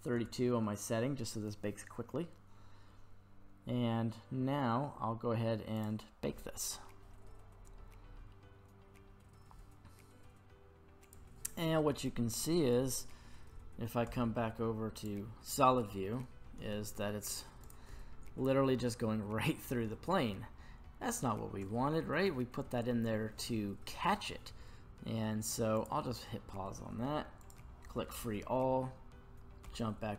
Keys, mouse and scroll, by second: 0.9-2.0 scroll down 3, 2.0-2.6 scroll down 5, 2.6-5.8 scroll down 2, 5.8-9.4 drag, 5.8-8.5 scroll down 2, 12.3-12.7 scroll up 1, 12.7-13.1 middle drag, 14.1 z, 15.7-16.1 middle drag, 16.3-17.6 scroll down 2, 17.6 click, 19.9 middle click, 20.5 scroll up 2, 21.7 shift+middle click, 25.8 click, 27.4 click, 29.7 z.